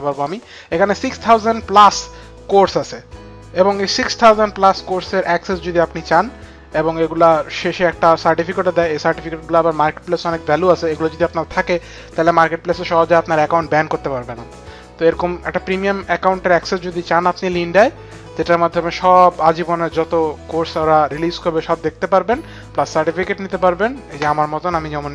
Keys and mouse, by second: 24.7 click.